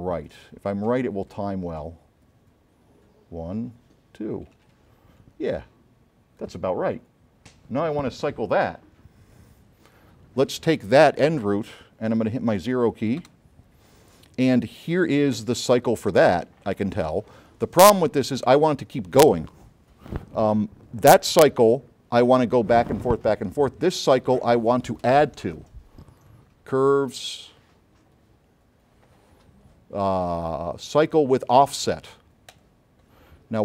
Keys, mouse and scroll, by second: 1.4-3.4 drag, 13.5 0, 14.7 middle click, 15.9 click, 20.1 middle click, 23.7 scroll up 2, 26.3 click, 32.6 click, 33.5 middle click.